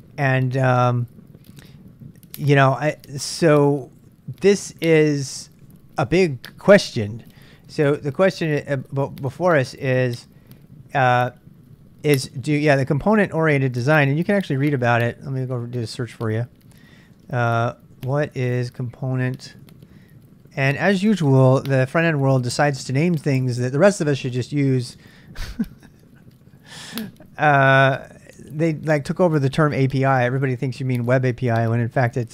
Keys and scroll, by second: 14.3 super+Tab, 16.0 super+Tab, 17.4-21.1 typing, 26.6-29.1 typing.